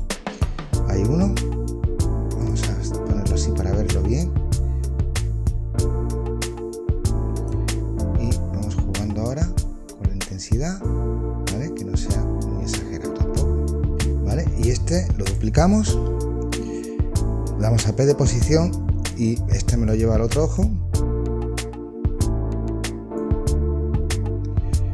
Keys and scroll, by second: 15.8 super+d, 17.7 p.